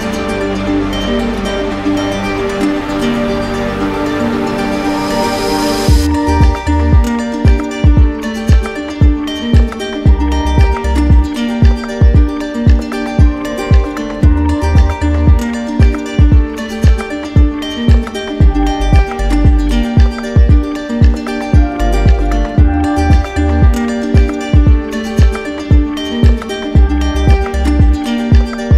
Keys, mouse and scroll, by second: 0.4 click, 1.4 click, 3.3 q, 3.7-4.9 right drag, 6.4-7.5 drag, 9.2-10.3 drag, 12.5 right click, 13.3 right click, 14.1 right click, 14.5 ctrl+z, 15.2 right click, 18.2 click, 20.8 click, 22.9 click, 23.7 right click, 24.3 right click, 24.8 shift+right click, 25.5 shift+right click, 25.6 right click, 26.2 right click, 27.0 ctrl+d.